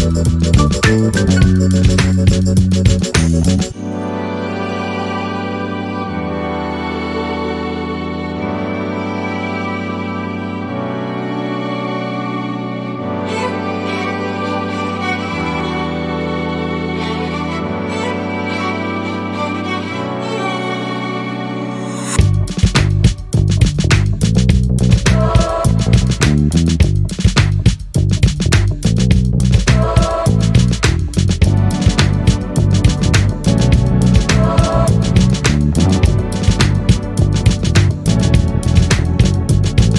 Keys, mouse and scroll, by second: 1.5-2.8 drag, 3.2 ctrl+d, 3.9 ctrl+click, 5.1-8.4 drag, 11.2 click, 12.8 click, 13.7-14.8 ctrl+drag, 16.9 click, 17.7-19.2 drag, 20.0 Delete, 21.1 click, 22.5-22.9 ctrl+scroll up 2, 23.6 ctrl+click, 24.7 click, 26.0 click, 27.0-28.3 drag, 28.7-30.0 drag, 30.2 click, 31.2 KP_5, 32.7 click, 34.5-34.9 ctrl+scroll up 2, 35.5 ctrl+click, 36.2 ctrl+click, 37.2 ctrl+click, 38.3 ctrl+click.